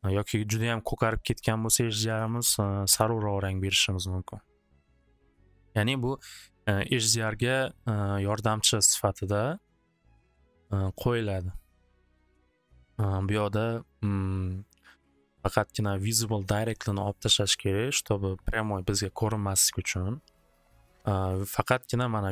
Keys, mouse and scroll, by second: 1.8-2.6 typing, 2.9 Return, 4.4-5.7 typing, 4.8 click, 5.0 click, 8.5-9.2 typing, 9.3 click, 11.3-13.1 drag.